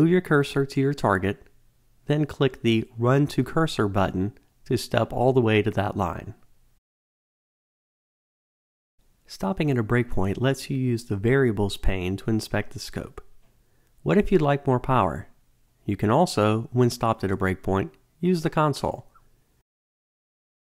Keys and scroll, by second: 6.4 alt+F9, 20.3 Return.